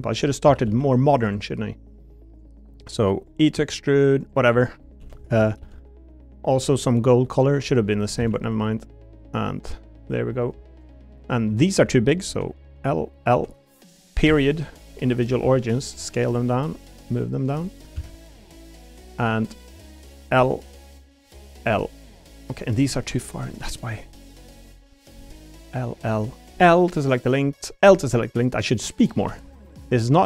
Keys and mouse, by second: 0.4 s, 0.7 x, 1.2 click, 3.5 e, 4.5 click, 5.0 l, 5.4 a, 5.6 g, 7.6 click, 8.2 shift+d, 8.3 click, 8.8 click, 12.3 l, 13.3 l, 15.4 s, 16.7 click, 17.9 ctrl+z, 18.5 click, 19.8 click, 20.4 l, 21.6 l, 22.2 click, 23.1 click, 23.4 l, 24.0 click, 24.8 click, 25.1 l, 26.3 click, 26.5 l, 26.9 click, 27.7 click, 28.3 click, 29.2 click.